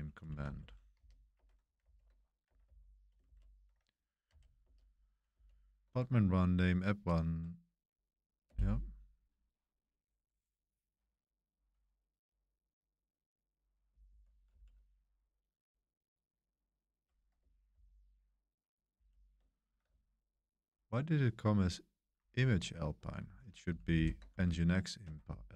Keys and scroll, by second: 0.4 Escape, 0.5-3.2 typing, 1.8 super+v, 4.3 super+c, 4.6 super+1, 4.9 super+c, 4.9 super+1, 4.9 shift+v, 8.4 Return, 14.0 Page_Down, 14.4 Page_Up, 17.7 ctrl+c, 18.9 ctrl+c, 21.2 super+1, 22.1 super+3, 22.2 super+1, 22.9 super+1, 23.9 super+7, 25.0 Escape, 25.2-25.5 typing.